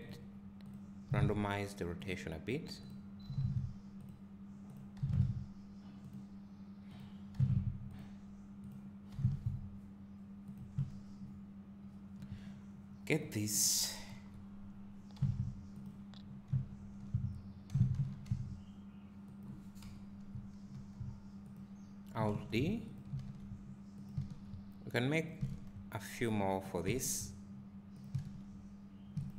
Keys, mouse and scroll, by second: 0.7 click, 1.1 r, 2.9 click, 3.2 r, 4.8 click, 5.0 r, 7.0 click, 7.3 r, 8.7 click, 9.1 r, 10.8 click, 13.2 click, 14.1 KP_7, 15.1 g, 15.8 click, 16.2 scroll, 17.7 g, 21.4 5, 21.5 click, 25.2 click, 27.0-28.0 alt+drag.